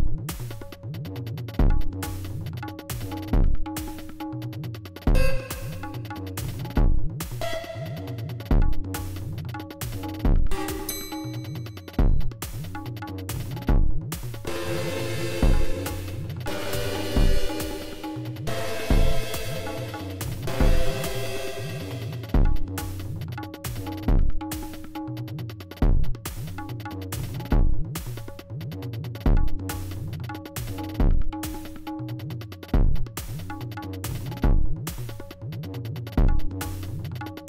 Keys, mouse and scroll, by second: 3.9-5.3 drag, 6.4-7.5 drag, 9.4-10.6 drag, 14.4 space, 22.5 space, 24.9-27.9 drag, 28.6 g, 29.7-31.5 drag, 32.8-33.9 ctrl+drag, 34.6 click, 36.6 click, 37.2-37.4 drag.